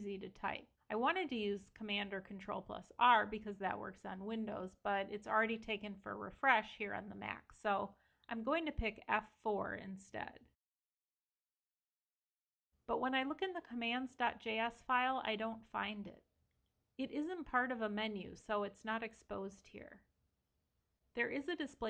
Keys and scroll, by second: 7.1 super+Right, 14.9 super+f, 21.1 Escape.